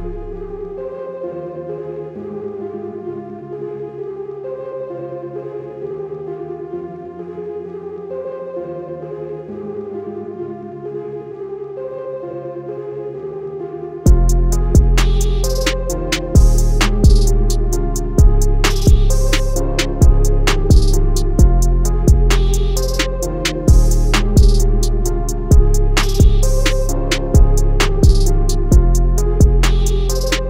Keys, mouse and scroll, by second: 0.1 BackSpace, 1.0 click, 1.1 BackSpace, 2.1 click, 7.3 BackSpace, 8.9 click, 12.0 click, 12.3 scroll up 1, 12.9 click, 20.7 click, 22.7 scroll down 1, 23.3 scroll up 1, 24.0 click, 24.2 scroll up 1, 26.5 click, 27.4 alt+scroll down 1, 27.9 click.